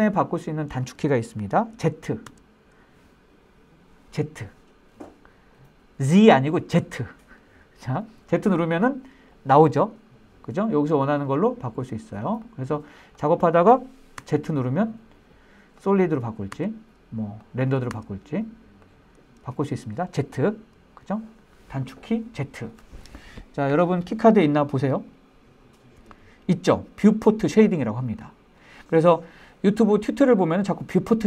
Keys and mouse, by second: 2.6 z, 14.6 z, 16.9 z, 18.3 z.